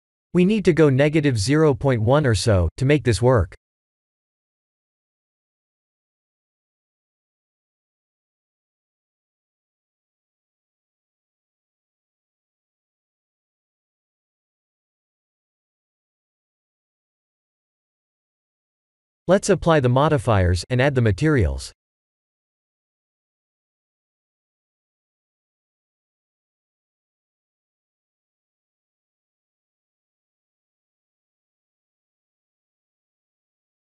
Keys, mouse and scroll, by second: 6.3-9.3 alt+middle drag, 10.8-11.3 alt+shift+middle drag, 13.8 click, 14.2-14.5 alt+middle drag, 14.9 KP_1, 17.0 click, 17.8 click, 22.4 click, 27.4 click.